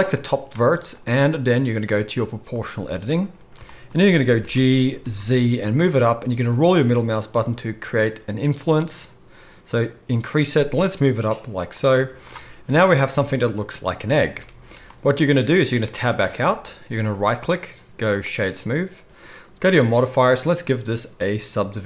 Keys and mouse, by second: 2.6-17.1 middle drag, 4.4 g, 12.0 z, 16.2 Tab, 17.1-21.8 right drag, 20.7-21.8 drag, 20.7-21.8 middle drag.